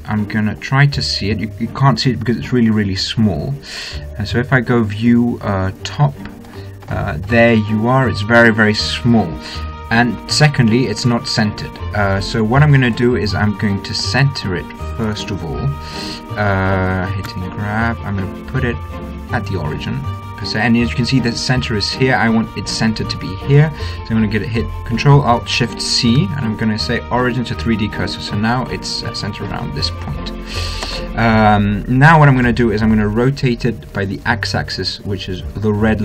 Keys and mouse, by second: 4.5 click, 6.0 click, 6.6-13.1 middle drag, 13.1 right click, 14.1-16.9 drag, 16.9 right click, 17.1 middle click, 17.5 g.